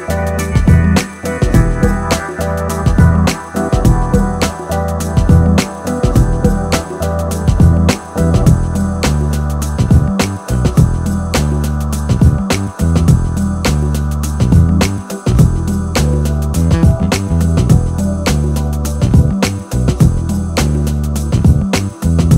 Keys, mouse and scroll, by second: 0.0-1.2 typing, 0.1 middle click, 0.3 middle click, 0.5 middle click, 0.7 Tab, 0.8 middle click, 0.8 Tab, 1.0 middle click, 1.1 scroll up 2, 1.2 middle click, 1.5 scroll down 4, 1.5 middle click, 2.1 middle click, 2.4 shift+click, 2.5 middle click, 2.5 shift+click, 2.7 alt+shift+click, 2.8 middle click, 3.3 middle click, 3.3 shift+click, 3.4 shift+middle click, 3.6 middle click, 4.0 middle click, 4.2 shift+middle click, 4.3 shift+click, 4.4 middle click, 4.5 scroll up 3, 4.6 middle click, 4.9 middle click, 5.1 shift+click, 5.4 scroll down 3, 5.4 shift+middle click, 5.8 shift+click, 6.0 shift+middle click, 6.5 ctrl+e, 6.6 shift+middle click, 6.8 scroll up 3, 6.9-10.2 typing, 7.0 middle click, 7.1 click, 7.3 middle click, 7.5 scroll down 1, 7.6 middle click, 7.8 middle click, 8.0 middle click, 8.5 Tab, 8.5 middle click, 8.8 Tab, 9.4 click, 9.6 middle click, 9.6-10.0 scroll down 3, 9.8 middle click, 10.0 middle click, 10.3 middle click, 10.5 scroll up 3, 10.6 click, 10.6 shift+middle click, 11.0 middle click, 11.3 alt+click, 11.4 middle click, 11.7 shift+click, 11.8 shift+middle click, 12.2 alt+click, 12.3 middle click, 12.4 scroll down 4, 12.5 g, 12.7 middle click, 12.8-13.4 scroll up 4, 12.9 middle click, 13.5 ctrl+e, 13.6 shift+middle click, 13.7 ctrl+e, 13.8 ctrl+z, 14.0 shift+middle click, 14.4 shift+click, 14.4 shift+click, 14.5 shift+click, 14.6 ctrl+e, 14.6 middle click, 14.7-15.3 scroll up 4, 15.0 ctrl+e, 15.1 middle click, 15.3 middle click, 15.4 shift+click, 15.5 ctrl+e, 15.6 middle click, 15.7 ctrl+z, 15.9 scroll up 1, 16.4 middle click, 16.4 scroll down 3, 16.5 Tab, 16.6 middle click, 16.6 Tab, 16.6 scroll up 2, 16.7 middle click, 16.8 ctrl+e, 16.9 middle click, 17.1 click, 17.6 ctrl+e, 17.6 shift+middle click, 18.0 ctrl+e, 18.1 shift+middle click, 18.4 click, 18.6 shift+middle click, 18.7 scroll up 2, 19.0 middle click, 19.4 middle click, 19.6 click, 19.7 middle click, 20.2 scroll up 3, 20.3 alt+m, 20.4 scroll down 2, 20.4 middle click, 20.5 Tab, 20.6 shift+middle click, 20.9 scroll up 1, 21.0 ctrl+a.